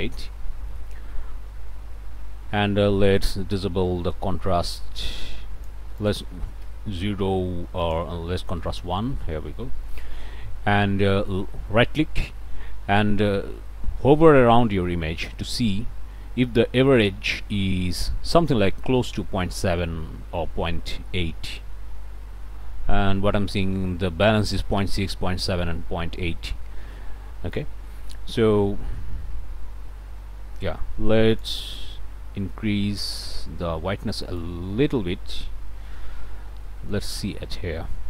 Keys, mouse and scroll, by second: 0.0 ., 0.2 scroll up 1, 0.7 click, 1.3 scroll up 1, 3.2-5.9 drag, 6.0 click, 6.2 0, 6.4 Return, 8.3 1, 8.6 Return, 9.8 click, 10.3 middle click, 10.7 middle click, 11.1 click, 12.2-27.7 ctrl+right drag, 31.3 click, 33.7-34.1 scroll up 1, 34.2 right click, 35.1 Escape, 36.0-36.5 scroll up 2, 36.5 scroll down 1, 36.7 click, 37.1-37.7 scroll up 2, 37.8 click.